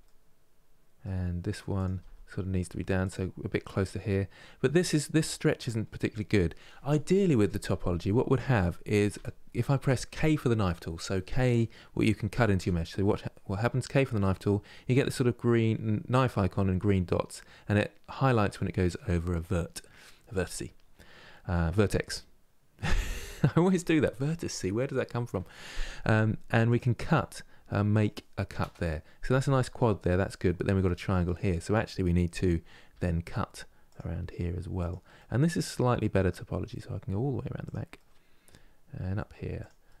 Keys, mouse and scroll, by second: 1.5 click, 1.6 g, 3.6-8.8 middle drag, 8.8 k, 12.3 k, 31.0-32.6 middle drag, 32.6 k, 34.9-40.0 middle drag.